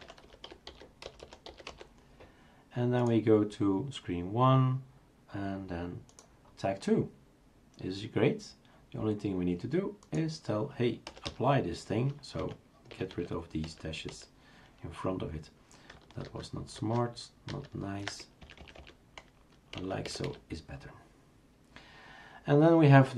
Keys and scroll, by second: 0.0-2.2 typing, 11.0 BackSpace, 11.2 BackSpace, 12.4 End, 12.6 Down, 12.9 Delete, 13.1 Delete, 13.7 Delete, 14.1 Delete, 16.3 ctrl+z, 16.8 ctrl+z, 17.5 ctrl+z, 18.4 Right, 18.6 Right, 18.8 Right, 19.8 Left, 20.1 Delete, 20.2 Delete.